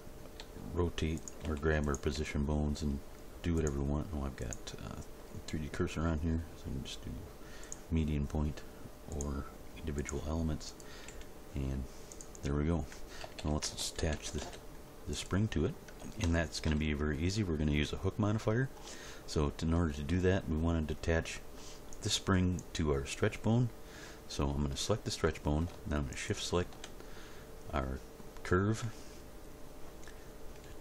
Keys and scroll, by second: 0.4 r, 1.4 g, 2.1 r, 11.1 g, 13.2 a, 14.0 alt+r, 14.1 alt+g, 14.4 alt+s.